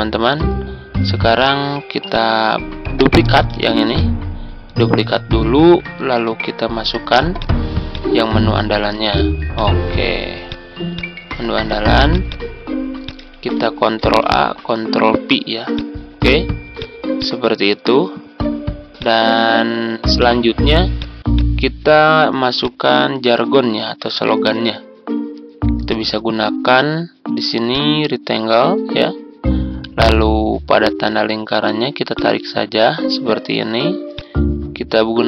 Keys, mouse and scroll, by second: 1.3 click, 3.5 ctrl+d, 3.8-6.1 drag, 6.2 Tab, 7.3 click, 8.9 ctrl+c, 9.4 click, 11.4-12.0 scroll, 12.0 click, 13.3 ctrl+a, 14.0 ctrl+v, 15.7-20.9 drag, 24.1 ctrl+scroll down 1, 25.8-29.2 drag, 30.5 ctrl+scroll up 1, 31.3-32.0 ctrl+scroll up 1, 32.0-33.2 drag, 34.8 ctrl+scroll down 1.